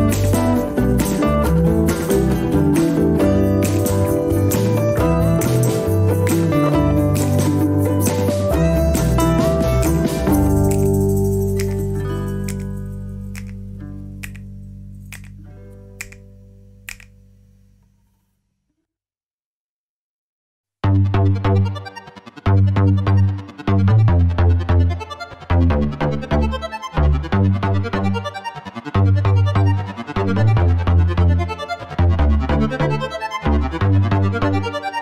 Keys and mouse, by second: 2.2 drag, 2.6 shift+drag, 3.9 ctrl+e, 4.6 ctrl+r, 5.2 Tab, 5.4 Tab, 8.2 shift+click, 8.4 x, 12.3 ctrl+r, 14.2 Tab, 14.3 Tab, 15.0 ctrl+r, 28.1 ctrl+r, 29.2 Tab, 29.3 Tab, 30.3 k.